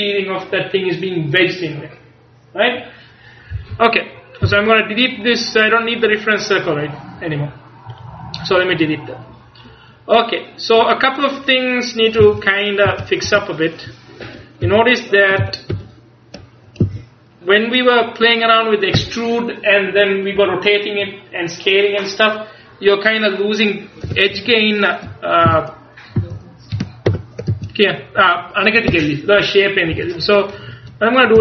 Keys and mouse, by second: 4.5 x, 12.3 z, 13.0 z, 13.3 Tab, 14.3 KP_1, 14.7 KP_3, 15.5 ctrl+KP_3, 15.8 ctrl+KP_1, 16.9 z, 24.1 Up, 24.4 KP_1, 25.6 z, 26.3 z, 27.3 ctrl+KP_1, 27.6 z.